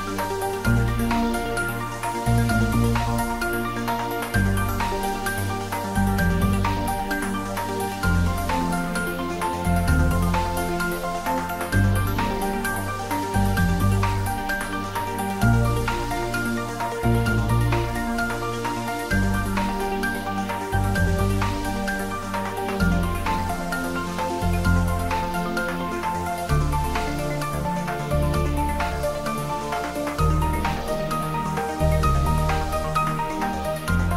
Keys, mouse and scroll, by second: 0.0 scroll down 1, 0.5 Tab, 0.9 scroll up 1, 1.7 click, 2.1-2.9 scroll down 1, 2.9-3.5 middle drag, 4.7 click, 5.7 s, 6.0 x, 7.6 click, 8.6-9.0 scroll down 1, 9.0-10.3 middle drag, 10.5-12.3 scroll up 1, 16.1 click, 16.7-17.2 scroll up 1, 17.2-19.0 middle drag, 19.0-19.8 scroll down 1, 19.8-21.6 middle drag, 22.8 click, 24.5 Tab, 26.6 click, 27.8-29.6 typing, 32.2 click, 32.6-34.1 middle drag.